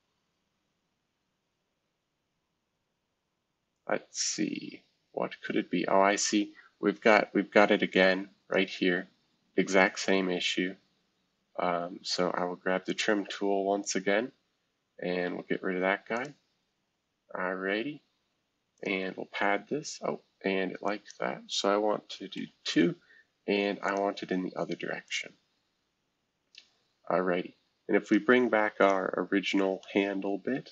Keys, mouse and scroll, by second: 1.8-4.1 scroll down 3, 4.1-4.8 scroll down 1, 4.8-6.4 scroll down 1, 6.4-7.0 scroll down 1, 7.0 F2, 7.5-9.5 drag, 9.5 F2, 10.6 shift+F2, 12.9 right click, 13.0-15.2 drag, 15.2 Escape, 16.1-17.7 drag, 18.7-20.3 drag, 20.8-22.3 drag, 22.3 Tab, 23.8 click, 25.0 click, 27.0-28.0 scroll up 1, 28.0 click, 28.8 click, 29.8-30.7 middle drag, 29.8-30.6 scroll up 1, 30.6-30.7 scroll up 1.